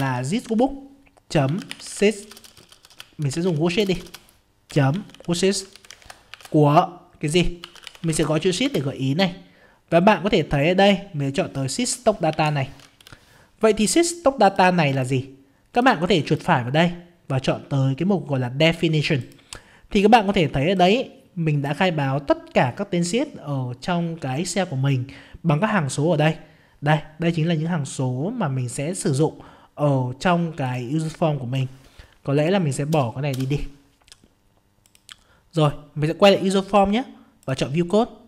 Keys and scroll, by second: 8.6 ctrl+space.